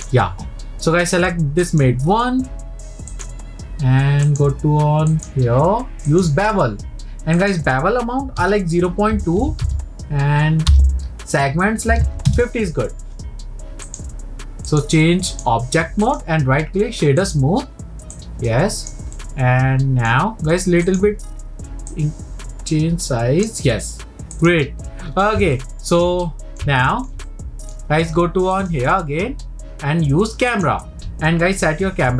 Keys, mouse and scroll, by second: 1.7 click, 3.1 click, 4.3 click, 5.1-10.4 drag, 13.8-16.1 drag, 16.1-18.1 right drag, 18.1 click, 19.1-20.9 middle drag, 20.9-22.0 drag, 24.4-25.1 drag, 25.6-28.5 middle drag, 28.5-31.7 drag.